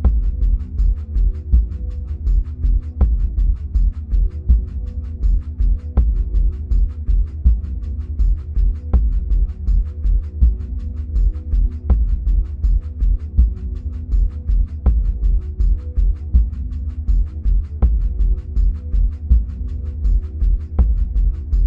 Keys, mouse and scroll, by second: 2.7-3.0 drag, 6.9-13.2 drag, 20.9-21.6 drag.